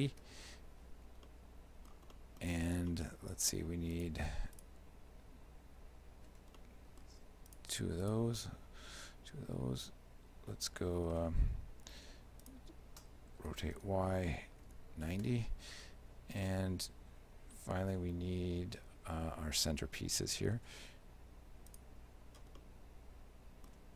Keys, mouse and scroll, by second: 1.3 shift+middle click, 2.2 middle click, 2.9 shift+middle click, 4.0 right click, 4.6 shift+right click, 6.6 shift+middle click, 7.6 shift+right click, 8.1 shift+right click, 8.4 shift+middle click, 12.0 shift+d, 13.5 r, 16.5 shift+middle click, 21.8 right click, 22.6 shift+middle click.